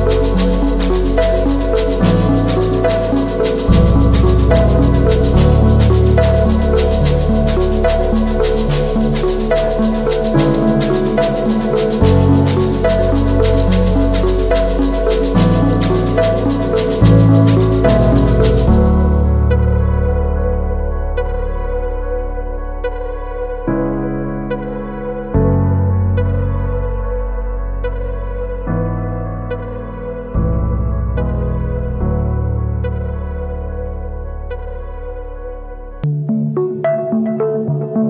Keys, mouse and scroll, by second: 6.0-6.8 scroll down 1, 7.1 ctrl+click, 8.0 scroll up 1, 20.1-20.6 typing, 23.1 typing, 23.9 double click, 25.0 typing, 25.4 double click, 26.5 typing, 27.0 double click, 35.0 right click.